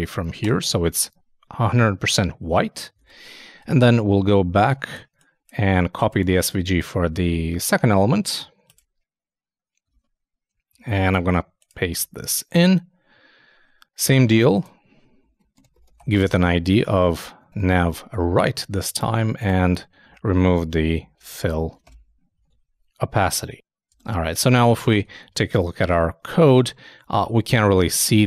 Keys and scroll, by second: 0.4 shift+BackSpace, 3.0 super+Tab, 3.7 super+2, 4.5 super+space, 9.9 super+Tab, 11.9 super+v, 16.1 shift+=, 16.2 shift+', 17.0 shift+Left, 20.2 alt+shift+Right, 21.8 shift+BackSpace, 22.3 shift+super+BackSpace, 22.4 super+s, 24.0 super+Tab, 24.9 super+i.